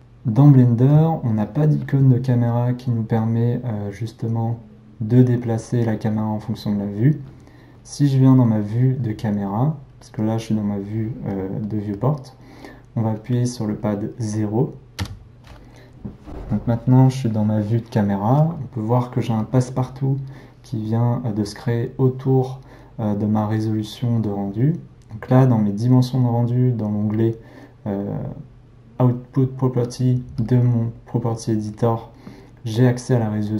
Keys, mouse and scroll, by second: 10.1-15.0 middle drag, 15.0 KP_0.